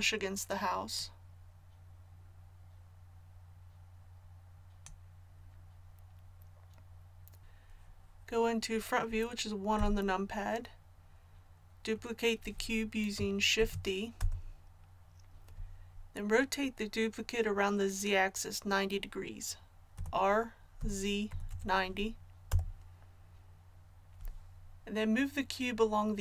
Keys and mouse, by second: 0.9-9.7 drag, 9.7 KP_1, 13.5 shift+d, 19.9 r.